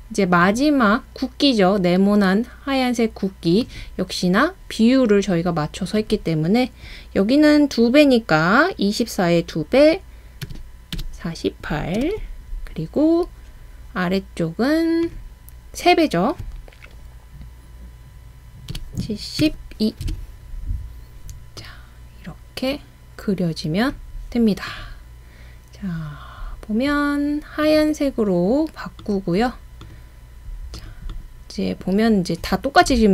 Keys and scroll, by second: 10.2-11.1 typing, 12.0 Return, 18.5-21.7 typing.